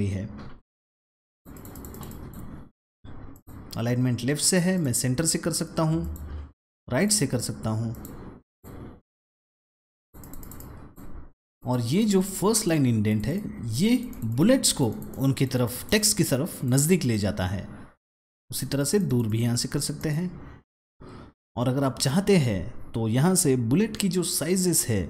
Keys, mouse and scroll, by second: 1.2 click, 1.4 double click, 1.6 click, 1.8 click, 2.0 double click, 3.2 click, 4.6 click, 5.9 click, 6.9 click, 7.8 click, 8.3 click, 9.9 click, 10.1 double click, 10.3 click, 10.5 click, 11.5 click, 11.8 double click, 12.0 click, 12.4 click, 13.0 double click, 13.6 click, 13.8 double click, 14.0 click, 14.7 double click, 15.0 click, 15.2 double click, 15.6 double click, 15.8 click, 16.0 double click, 16.4 click, 16.6 double click, 16.9 click, 18.2 click, 18.4 double click, 18.9 double click, 19.1 click, 19.9 click.